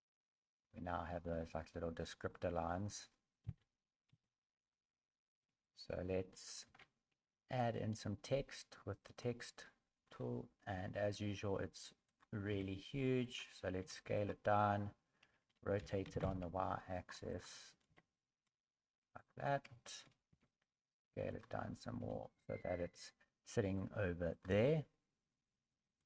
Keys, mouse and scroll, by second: 0.6 scroll down 3, 0.6 a, 1.3 middle click, 2.0 middle click, 2.7 middle click, 3.4 KP_1, 4.1 KP_3, 4.9 scroll up 2, 5.7 scroll up 2, 6.6 shift+a, 10.0 scroll down 5, 10.7 s, 12.5 s, 19.8 shift+middle click, 19.8 shift+r, 20.3 s, 21.6 scroll up 3, 22.0 g, 23.6 s, 24.5 g.